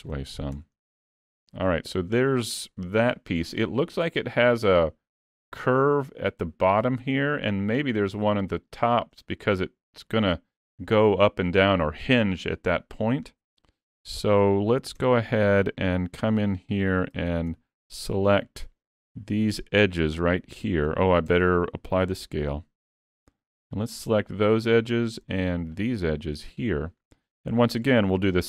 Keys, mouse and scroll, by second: 0.1 middle click, 0.5 Tab, 0.8 middle click, 1.4 s, 1.6 middle click, 13.7 middle click, 14.2 scroll up 2, 14.5 shift+middle click, 15.0 Tab, 15.3 scroll up 2, 15.6 middle click, 17.2 alt+a, 17.5 2, 18.9 alt+z, 19.5 click, 20.6 shift+click, 21.3 Tab, 21.9 ctrl+a, 23.0 Tab, 24.1 middle click, 25.8 shift+click, 26.7 shift+click, 27.2 middle click, 28.1 middle click.